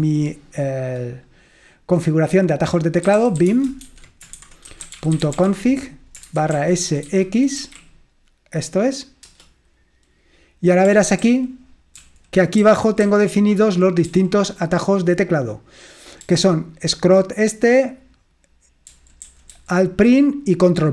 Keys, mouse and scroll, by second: 3.0-7.6 typing, 9.4 Return, 11.3 ctrl+d, 12.0 ctrl+d, 12.7-14.3 typing, 16.8 typing, 19.0-19.5 typing.